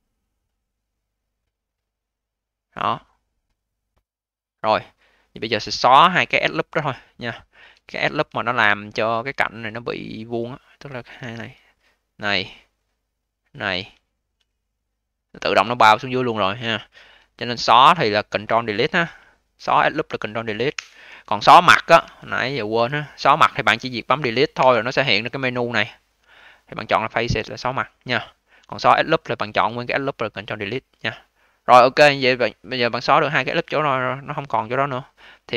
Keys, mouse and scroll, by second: 2.9-4.0 scroll down 7, 4.0 click, 5.1-7.3 scroll up 1, 7.3-7.8 scroll down 2, 7.8 alt+middle click, 8.3-8.7 scroll down 1, 8.7 alt+middle click, 9.2-9.6 scroll up 4, 11.1 2, 11.5 click, 11.6 click, 13.1 shift+click, 13.3 shift+click, 13.8-14.5 scroll down 2, 14.5-15.2 alt+middle drag, 15.2-17.3 alt+drag, 17.3-18.1 scroll up 4, 18.1-20.6 scroll up 1, 20.6 ctrl+Delete, 21.9 3, 22.9 click, 24.5 Delete, 28.5 ctrl+z, 30.2-31.2 scroll down 3, 31.2 click, 31.9-32.3 alt+middle drag, 32.3-34.4 alt+drag, 34.4-34.7 alt+middle drag, 34.7-35.5 alt+drag.